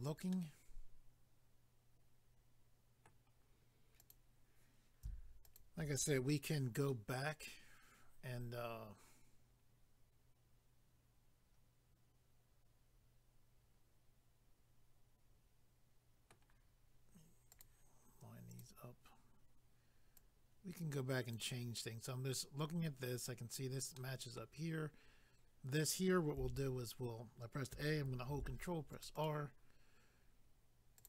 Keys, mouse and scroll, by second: 0.3 middle click, 4.0 click, 4.1 click, 5.4 shift+click, 6.9 middle click, 17.5 click, 17.6 click, 18.5 click, 18.6 click, 20.2 click, 24.0 middle click, 26.4 a, 28.3 ctrl+r, 28.9 click, 29.0 click, 29.1 click, 29.3 double click, 31.0 click.